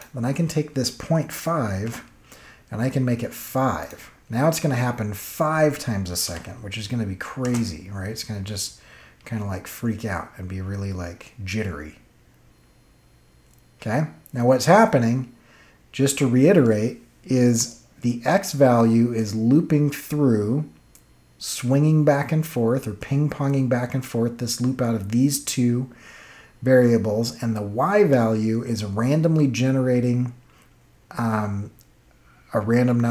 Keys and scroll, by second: 1.8 BackSpace, 6.2 Home, 7.4 space.